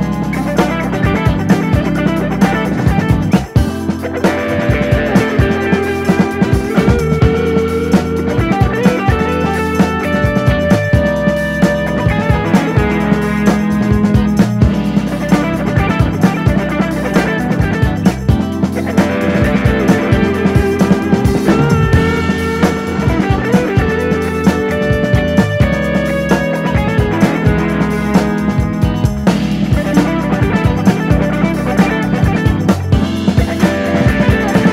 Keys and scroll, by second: 4.5 super+d, 17.1 BackSpace, 23.9 super+d, 28.2 BackSpace, 28.4 Left, 28.9 Right, 32.7 super+d.